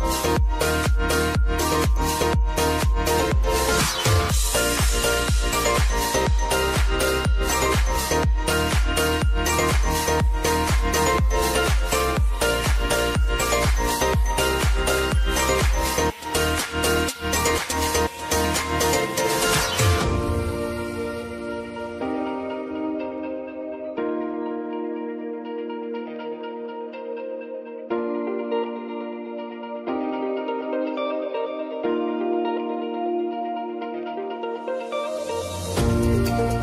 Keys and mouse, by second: 0.0 d, 1.0 click, 6.6 space, 9.5 space, 10.6 click, 10.9 space, 15.4 space, 16.2-20.9 drag, 21.1 space, 24.3 space, 26.3 click, 26.7 space, 31.1 space.